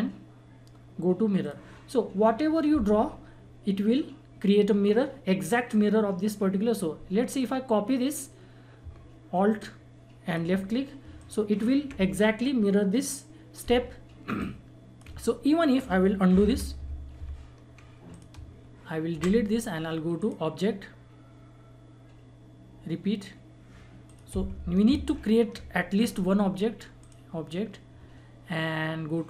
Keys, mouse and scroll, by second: 1.4 click, 3.6 click, 8.8 click, 9.6-11.2 alt+drag, 11.2-16.3 alt+drag, 14.3 alt+Num_Lock, 16.3 ctrl+z, 18.1 click, 19.1 Delete, 20.2 click, 24.0 click, 24.8 ctrl+z, 27.0 click.